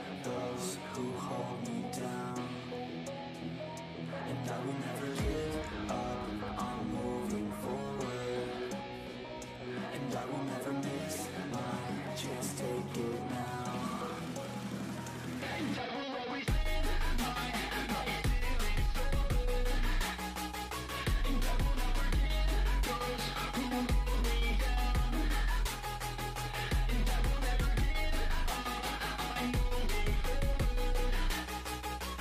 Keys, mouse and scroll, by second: 0.9 ctrl+click, 2.2 ctrl+click, 3.4 ctrl+z, 3.8-4.8 ctrl+drag, 5.4 ctrl+z, 5.8 ctrl+click, 7.2 ctrl+click, 10.2 ctrl+click, 11.7 shift+middle click, 12.3 ctrl+click, 13.7 ctrl+click, 15.0-15.9 scroll down 8, 15.9 shift+middle click, 16.1 scroll up 5, 17.2 click, 17.4 shift+middle click, 17.7 ctrl+z, 19.1-19.4 scroll up 5, 19.6 click, 20.4 ctrl+z, 20.6 ctrl+z, 21.0 ctrl+z, 21.3 ctrl+z, 22.0 ctrl+z, 22.3 f, 22.9-24.6 drag, 24.6 scroll down 5, 25.0 shift+middle click, 25.2-26.3 scroll up 6, 25.7 shift+middle click, 25.9 shift+middle click, 26.5 shift+middle click, 26.9-28.6 ctrl+drag, 28.6-29.0 scroll down 13, 29.1 shift+middle click, 29.5-30.6 scroll up 6, 29.9 shift+middle click, 30.6 shift+middle click, 30.8-31.1 scroll down 1, 31.1 ctrl+click, 31.7 scroll down 3, 31.9 shift+middle click.